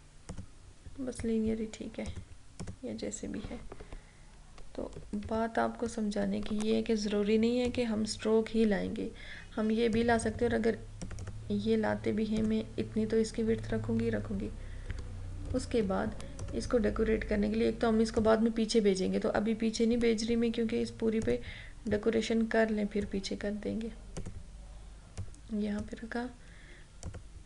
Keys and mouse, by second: 0.4 click, 5.3 ctrl+-, 7.8 click, 14.4 ctrl+=, 16.5 click, 21.3-27.2 drag.